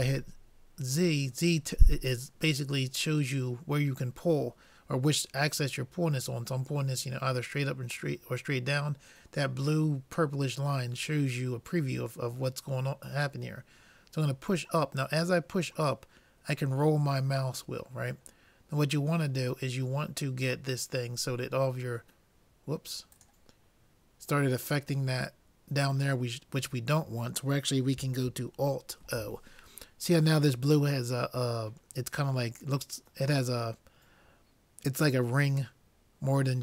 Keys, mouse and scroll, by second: 29.4 alt+o.